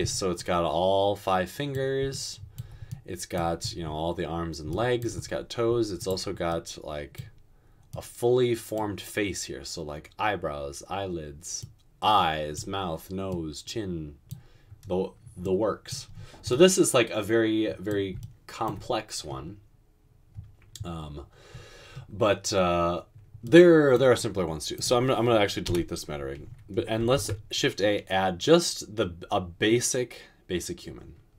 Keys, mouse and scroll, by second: 25.7 Delete, 27.1 a.